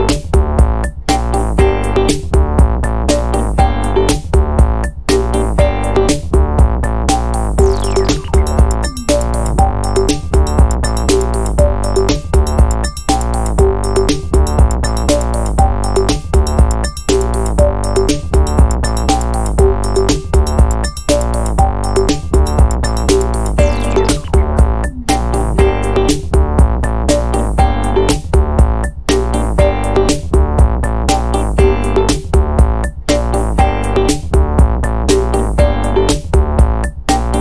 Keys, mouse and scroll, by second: 1.7 click, 2.6-3.5 typing, 5.7 click, 6.2 1, 6.6 0, 7.7 click, 8.2-8.6 scroll down 2, 9.6 click, 12.2 click, 13.4 5, 13.8 0, 15.2-16.4 drag, 16.9-18.3 drag, 18.8 click, 19.6-21.8 drag, 22.6 click, 23.7 ctrl+click, 24.6 click, 26.0 0, 30.2 click, 31.8 click, 32.8 click, 33.9-34.8 typing.